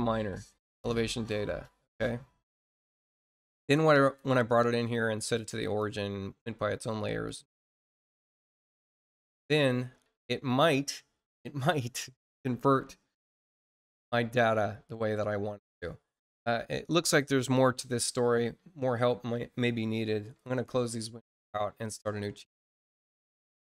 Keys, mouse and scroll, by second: 0.7 click, 1.3 scroll down 2, 2.2 scroll down 2, 3.9 click, 5.5 click, 7.2 click, 7.9 click, 8.4 click, 14.1 scroll down 1, 22.1 click.